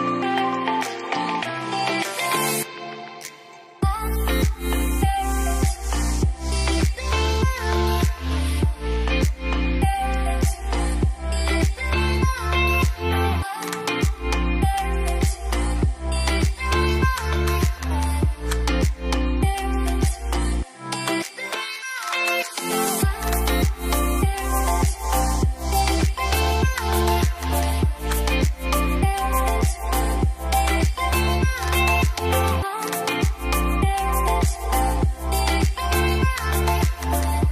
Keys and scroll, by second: 17.2-18.1 typing, 23.4-24.1 typing, 27.6 typing, 27.7 Return.